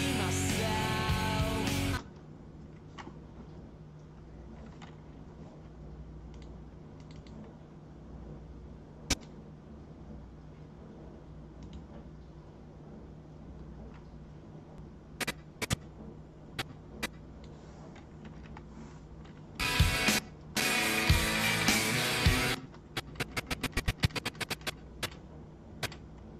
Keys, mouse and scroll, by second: 1.9 space, 6.3 click, 6.9 click, 7.1 click, 9.1 click, 11.6 right click, 14.7-17.4 drag, 18.2 =, 18.4 =, 19.6 space, 20.2 space, 20.5 space, 22.5 space, 22.9 Left, 23.2 Left, 23.3 Left, 23.5 Left, 23.6 Left, 23.7 Left, 23.9 Left, 24.0 Left, 24.1 Left, 24.2 Left, 24.4 Left, 24.5 Left, 25.0 Left, 25.8 Left.